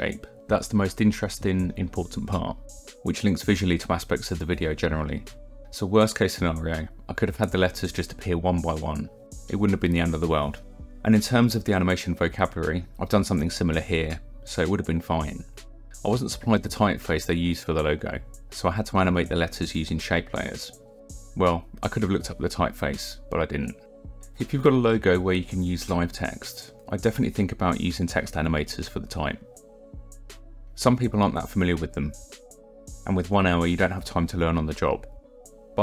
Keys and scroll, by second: 21.9 alt+Left.